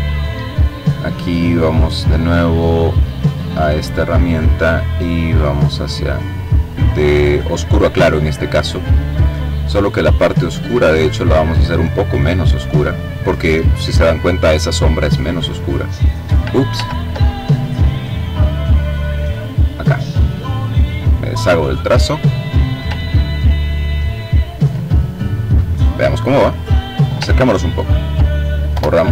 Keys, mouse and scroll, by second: 2.6 click, 4.8-6.4 drag, 9.9 click, 10.8-12.2 drag, 14.4 click, 16.0 ctrl+z, 18.6 click, 20.0 click, 22.4-23.3 ctrl+scroll down 2, 23.3-24.9 ctrl+drag, 26.5-27.0 ctrl+scroll up 2, 27.9 Delete.